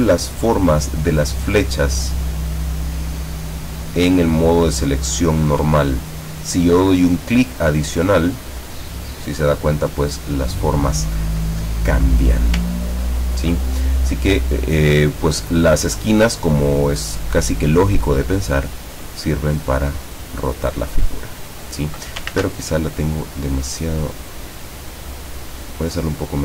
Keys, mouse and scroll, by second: 4.7 ctrl+scroll up 2, 5.2 ctrl+scroll down 2, 6.0 ctrl+middle click, 8.3 click, 12.3 scroll up 2, 12.9-13.4 ctrl+scroll down 4, 18.8-21.9 drag, 22.3 ctrl+z, 23.0 click, 24.0 click.